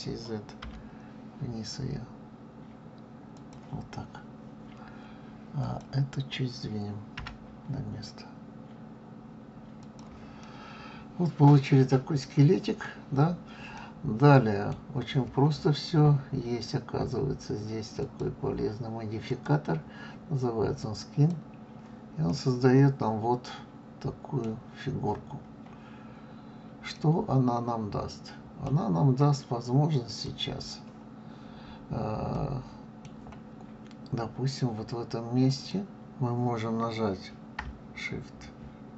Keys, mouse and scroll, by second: 5.6 click, 7.1 g, 10.4-13.0 middle drag, 13.0-13.7 scroll down 4, 13.7-16.7 middle drag, 18.0 click, 19.3-22.2 drag, 22.2-24.9 middle drag, 24.9-26.0 scroll up 4, 26.1-26.9 scroll down 2, 26.9-29.9 middle drag, 30.0 click, 31.2-32.2 scroll up 1, 32.3-35.3 middle drag, 35.5 click.